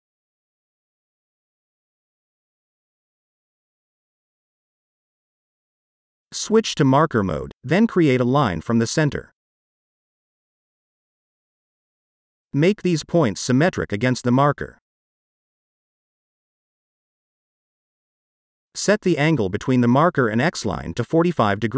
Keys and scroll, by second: 1.2-3.6 typing, 14.1 s, 20.1-21.5 typing.